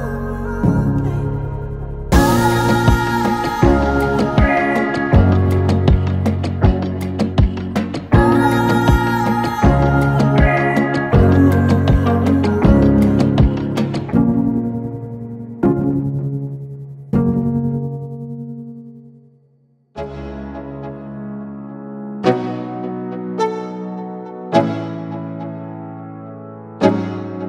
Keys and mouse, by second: 0.4 ctrl+z, 1.2 click, 1.8 i, 2.0 click, 3.7 Tab, 4.6 click, 7.7 click, 8.8 i, 9.3 click, 9.4 v, 10.0 click, 11.5 Tab, 12.5 click, 13.0 Tab, 14.4 click, 15.5 Tab, 16.1 click, 17.1 Tab, 18.7 ctrl+a, 19.2 ctrl+a, 20.0 Tab, 21.1 click, 22.9 i, 23.2 click, 23.3 v, 23.9 click, 25.4 Tab, 26.2 click.